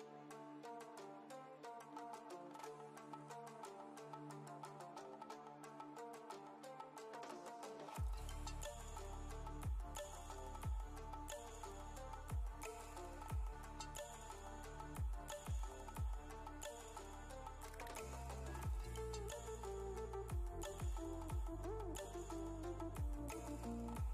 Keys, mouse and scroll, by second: 0.6 click, 3.1 click, 3.6 click, 14.2 click, 14.3 click, 17.1 click, 19.9-23.1 drag.